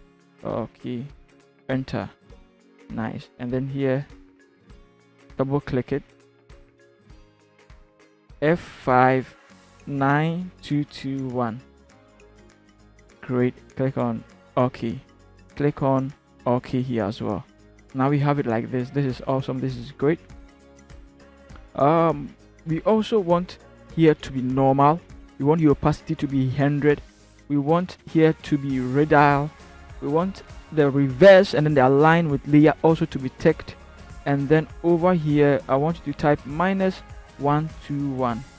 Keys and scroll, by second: 8.3 f, 10.6 2, 11.1 1.